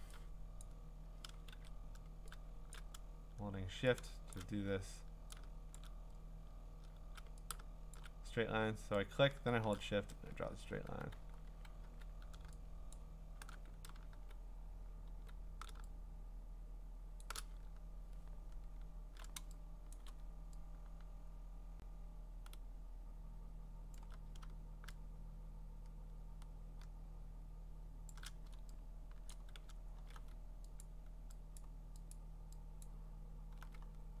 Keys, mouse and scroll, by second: 0.6 click, 1.0 [, 1.5 ctrl+z, 2.8 shift+click, 4.3 shift+click, 5.8 shift+click, 8.0 shift+click, 9.8 shift+click, 12.9 shift+click, 13.5-15.3 typing, 17.2 shift+click, 17.7-18.8 scroll, 19.4 scroll, 19.9 scroll, 19.9 click, 20.6 click, 23.9 alt+click, 28.1 shift+click, 29.3 click, 29.7 scroll, 30.8 alt+click, 31.6 alt+click, 32.1 alt+click, 32.8 alt+click, 33.8-34.2 scroll.